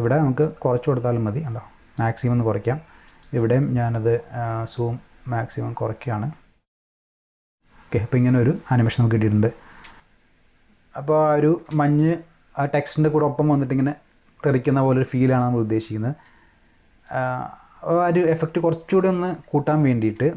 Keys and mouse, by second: 0.4-1.9 drag, 3.1 click, 8.7 space, 9.3-9.7 drag, 9.8 space, 11.6 space, 17.1-17.9 drag.